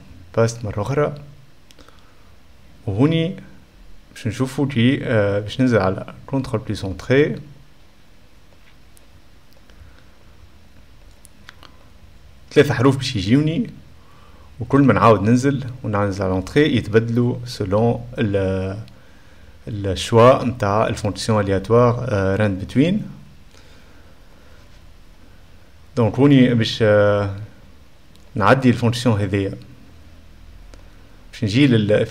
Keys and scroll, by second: 11.4 ;, 11.8 Return, 12.8 -, 15.9 BackSpace, 16.1 \, 16.1 Return, 16.6 /, 16.6 ..